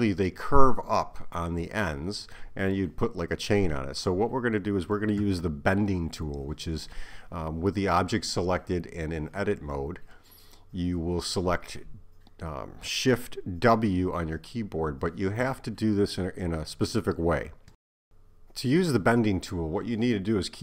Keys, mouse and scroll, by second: 2.7 Tab, 9.2 Tab, 11.8 KP_7, 16.6 shift+w.